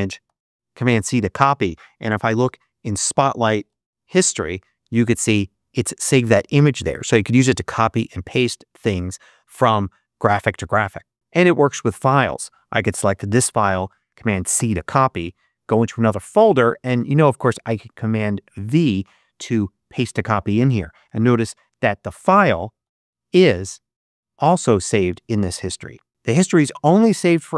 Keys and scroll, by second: 0.2 super+c, 2.3 super+space, 3.5 super+4, 14.5 super+c, 21.2 super+space, 22.7 super+4.